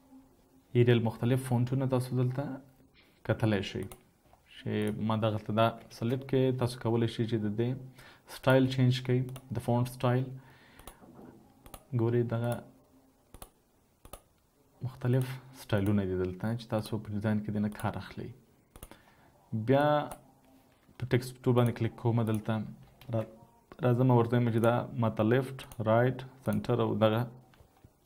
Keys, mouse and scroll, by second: 6.2 typing, 23.6 typing.